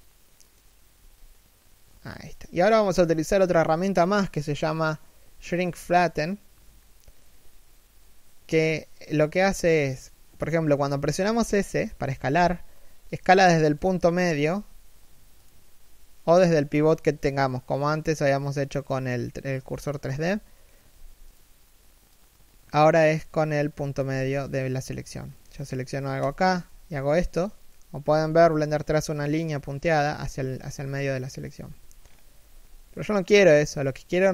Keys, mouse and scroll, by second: 11.9 s, 13.6 middle click, 14.2 s, 19.2 KP_3, 19.7 KP_1, 20.5 s, 23.7 s, 25.1-25.7 scroll down 1, 25.8 shift+right click, 26.3 s, 31.6-32.1 scroll up 1, 32.1 s.